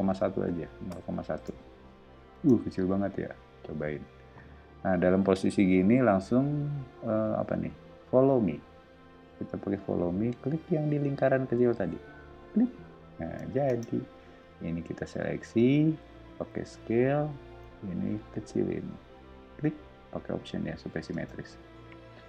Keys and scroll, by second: 0.2-2.3 typing, 13.6 space, 16.5 s, 21.1 space.